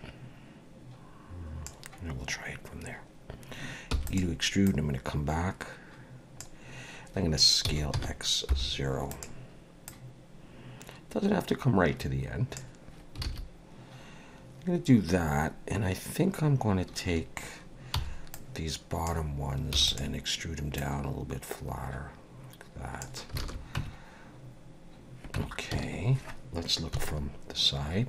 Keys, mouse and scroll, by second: 3.9 e, 4.7 click, 7.6 s, 9.9 click, 12.6 click, 13.2 alt+a, 17.9 b, 19.7 e, 20.8 click, 23.4 alt+a, 23.8 Tab, 25.4 Tab, 25.7 a, 26.9 KP_3.